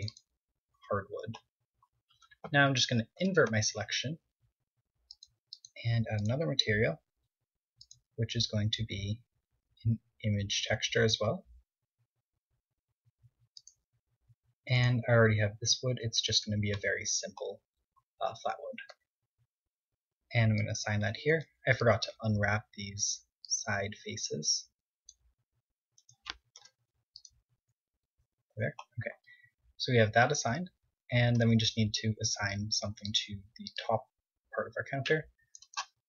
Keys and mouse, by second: 3.0 ctrl+i, 5.0-9.4 drag, 14.7 click, 18.7 KP_3, 20.3-22.2 drag, 21.0 a, 21.2 c, 25.9-27.6 right drag, 26.3 u, 27.3 KP_1, 28.3 a, 28.4-29.8 middle drag, 31.2 KP_1, 32.6 c, 35.9 click.